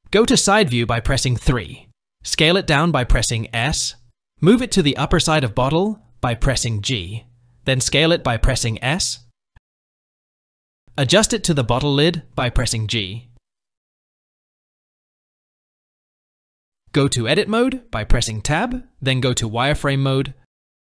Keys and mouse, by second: 2.4 s, 4.6 g, 7.3 s, 10.9 g, 12.3 s, 12.9 g, 14.7 g, 16.6-17.4 shift+middle drag, 18.1 Tab, 19.6 z.